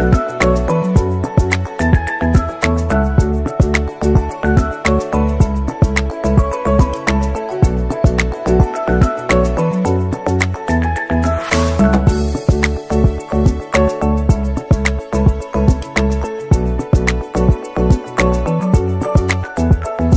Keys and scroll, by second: 0.2 0, 1.5 Return.